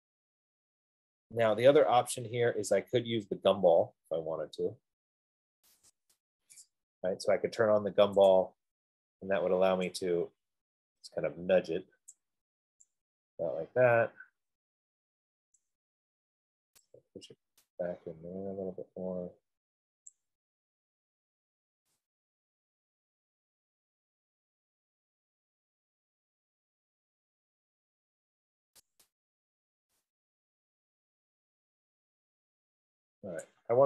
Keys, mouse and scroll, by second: 6.3 click, 8.7 click, 12.3 click, 15.9 right click, 18.9 F15, 20.3 click, 23.9-25.3 drag, 29.1-32.4 drag, 33.6 click.